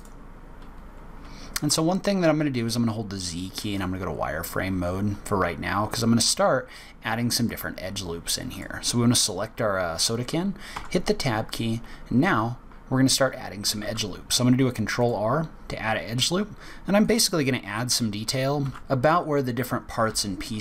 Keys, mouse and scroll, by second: 1.7 z, 4.9-5.2 scroll up 2, 8.5 click, 9.2 click, 10.7 Tab, 13.8 ctrl+r, 18.6 ctrl+r.